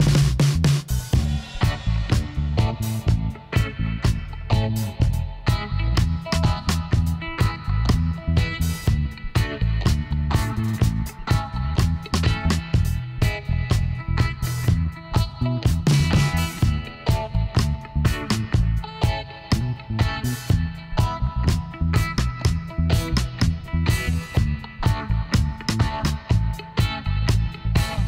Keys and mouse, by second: 2.1-4.5 middle drag, 4.5-6.3 right drag, 5.6 g, 8.3-9.7 middle drag, 9.7-11.6 right drag, 10.6 g, 14.8-16.5 right drag, 15.8 g, 16.5-17.5 middle drag, 18.7-21.3 middle drag, 21.9-23.5 drag, 22.5-24.7 right drag, 24.7 f.